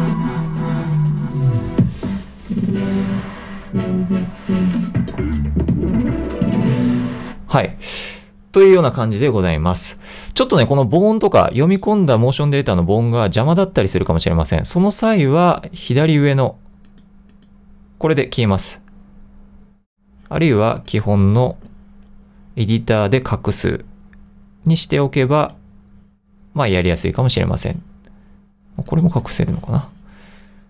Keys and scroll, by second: 12.8-13.6 typing.